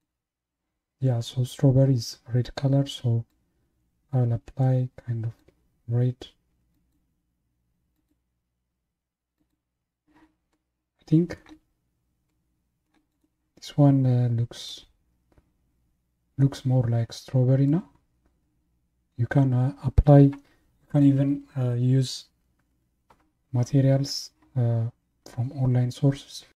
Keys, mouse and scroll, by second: 10.5-11.7 middle drag, 11.7 scroll down 4, 12.3-13.1 middle drag, 13.1 click, 13.8-14.2 scroll up 2, 14.7-16.8 middle drag, 16.8-17.1 scroll up 1, 17.7-20.8 middle drag.